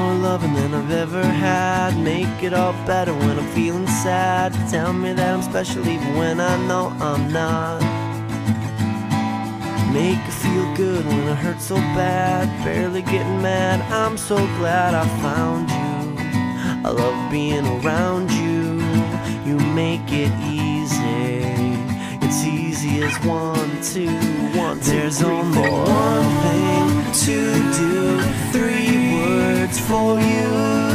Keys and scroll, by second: 5.3 ctrl+z, 15.7 ctrl+z, 17.4 ctrl+z, 19.0 ctrl+z, 28.0 ctrl+z.